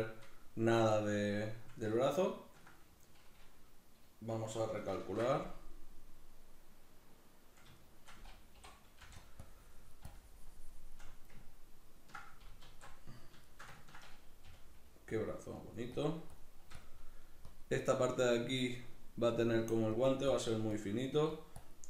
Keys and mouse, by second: 0.0-1.0 shift+middle drag, 1.0-2.1 shift+drag, 2.1-7.1 ctrl+middle drag, 7.1 ctrl+r, 7.8 shift+middle click, 9.3 click, 10.1-11.4 shift+drag, 11.4-12.6 ctrl+middle drag, 12.6 alt+q, 13.4-14.4 shift+middle drag, 14.4 g, 15.1-21.8 drag.